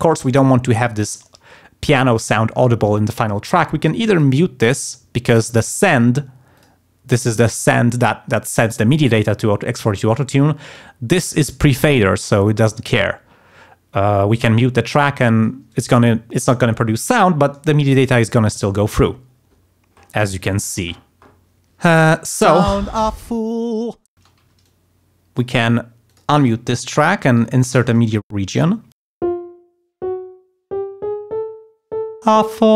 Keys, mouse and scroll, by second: 4.1 click, 6.5 click, 14.8 click, 22.5 space, 24.2 space, 24.4 d, 24.6 click, 26.1 click, 27.4 g, 27.7 click, 28.3 shift+d, 28.6 shift+click, 29.2 click, 29.9-32.3 drag, 32.4 click.